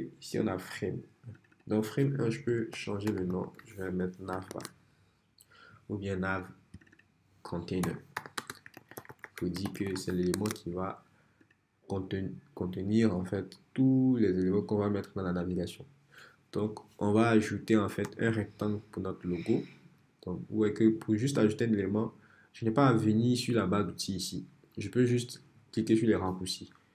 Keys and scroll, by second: 2.5-4.4 typing, 4.5 Return, 7.6-10.5 typing, 18.1 r.